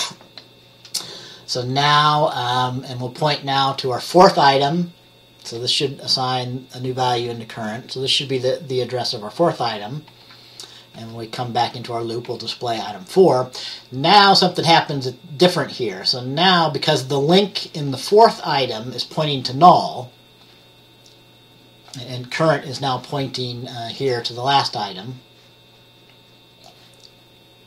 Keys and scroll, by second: 2.5 F10, 5.6 F10, 10.2 F10, 11.1 F10, 12.4 F10.